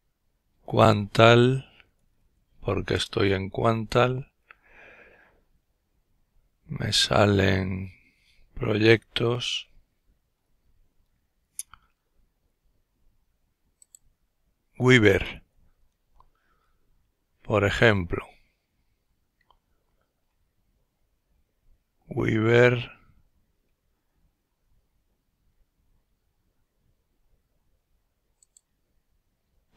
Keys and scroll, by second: 0.0-2.1 typing, 2.3 Return, 3.7 typing.